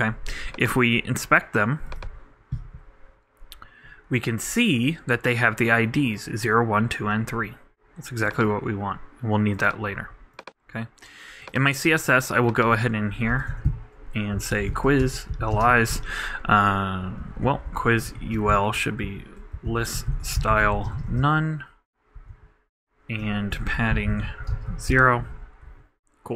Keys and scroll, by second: 15.6 shift+space, 15.7 shift+[, 15.9 shift+Return, 17.4 alt+Up, 18.1 alt+BackSpace, 18.3 alt+u, 20.4-21.2 typing, 24.0-24.8 typing.